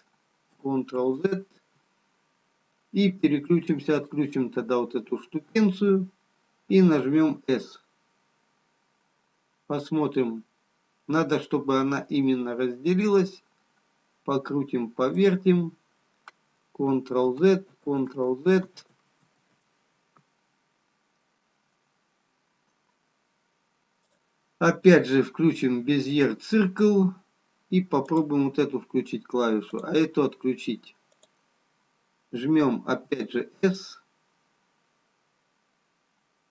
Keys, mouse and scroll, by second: 5.7 click, 7.1 s, 17.4 ctrl+z, 20.7 ctrl+z, 22.0-22.4 scroll down 1, 24.0 click, 28.3 click, 34.6 s.